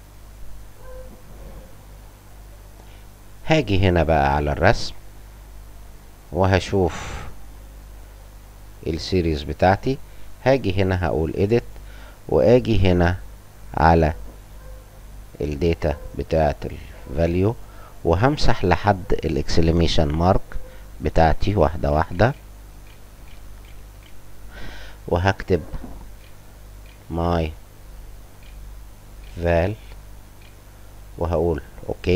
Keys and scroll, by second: 18.1 ], 20.0-23.9 typing, 26.1-29.1 typing, 30.3 l.